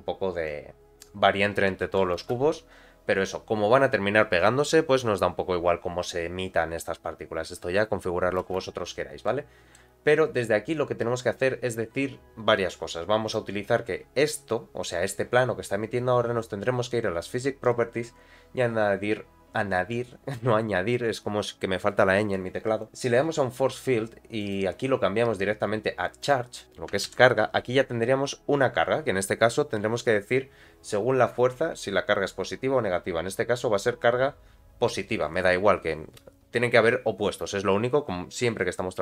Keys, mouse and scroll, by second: 0.4 click, 1.8 shift+Left, 2.2 space, 8.8-9.2 scroll down 2, 8.8 space, 9.3 middle click, 13.2 click, 14.4-15.3 scroll down 1, 17.6 click, 22.8 click, 24.4-26.9 drag, 27.1 shift+Left, 27.9-28.4 scroll up 2, 28.4-30.2 scroll down 1.